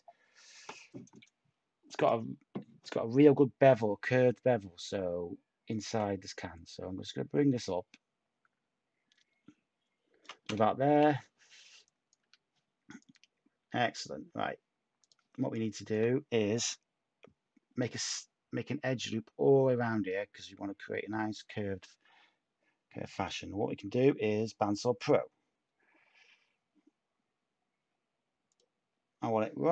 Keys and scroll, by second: 10.4 /, 12.1 Tab, 14.3 Tab, 17.9 u.